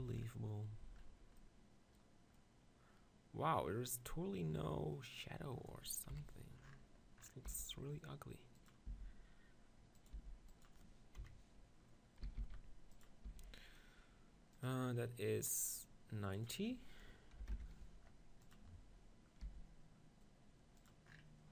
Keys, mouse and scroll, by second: 2.4-4.5 middle drag, 6.1 KP_1, 6.6-8.4 middle drag, 7.5 g, 8.7-10.8 drag, 8.9 s, 10.2 g, 11.2 KP_7, 12.3 s, 13.3 r, 16.0-18.0 drag, 18.0 middle click, 19.4 g, 20.9-21.5 drag.